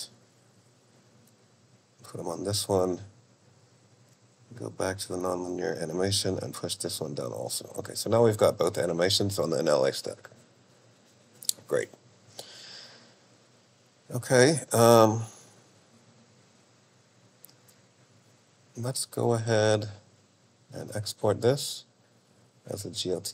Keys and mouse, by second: 0.3-1.6 drag, 3.0-5.5 drag, 6.7 click, 19.7-22.7 drag.